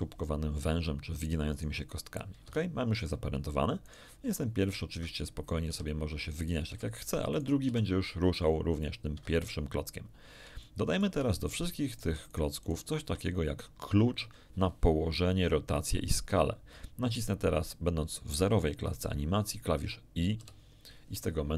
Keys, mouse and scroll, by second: 1.1 click, 1.5 click, 2.4 Escape, 3.8 right click, 4.2 g, 4.9 Escape, 5.6 r, 7.0 Escape, 7.3 right click, 7.6 r, 9.1 Escape, 10.6 shift+middle click, 11.4 shift+right click, 11.8 shift+right click, 12.2 shift+right click, 20.3 i.